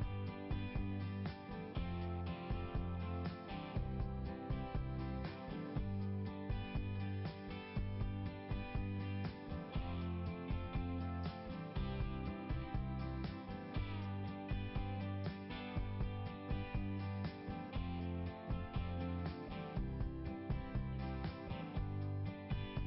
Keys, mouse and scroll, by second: 0.5 click, 2.1 click, 4.1 click, 6.6 click, 7.5 click, 9.5 scroll down 1, 11.1 scroll down 1, 11.4-13.6 typing, 14.8 click, 19.8 scroll down 1, 21.9 click, 22.0 click.